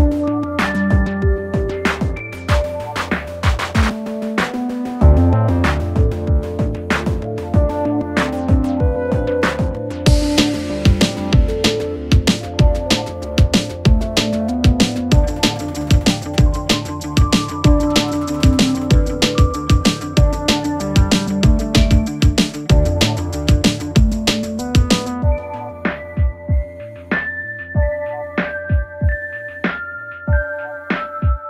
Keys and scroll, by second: 0.0-0.8 typing.